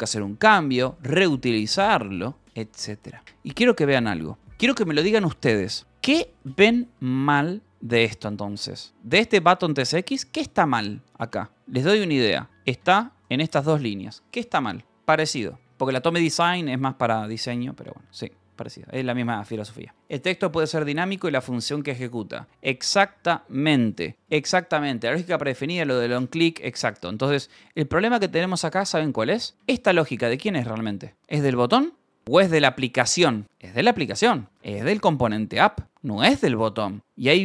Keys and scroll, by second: 1.1 ctrl+j, 3.2 k, 3.7 j, 4.1 Return, 7.1 j, 7.7 j, 8.5 Escape, 8.7 :, 9.8 Return, 9.9-13.1 typing, 12.0 Escape, 26.9 Escape, 27.3-30.6 typing, 32.2 k, 32.8 k, 33.2 j, 33.4 Escape, 34.4 k, 35.7 shift+v, 35.8 Escape, 36.6 ctrl+k, 37.3 h.